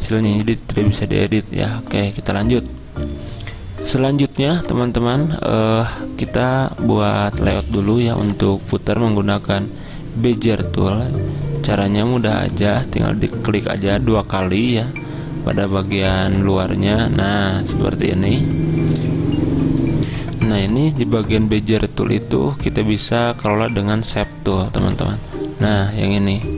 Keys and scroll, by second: 4.3 z, 20.1 F10, 20.3 F10.